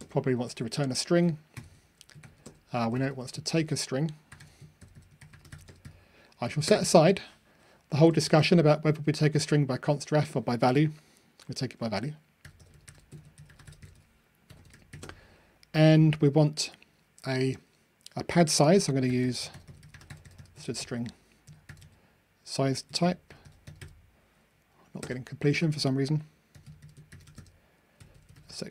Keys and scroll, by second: 0.5 super+v.